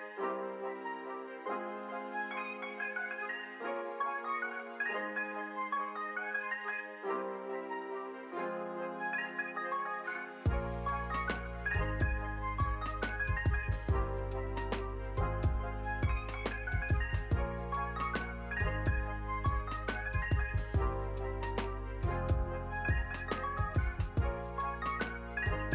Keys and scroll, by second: 9.8 shift+r, 10.6 r, 17.5 s.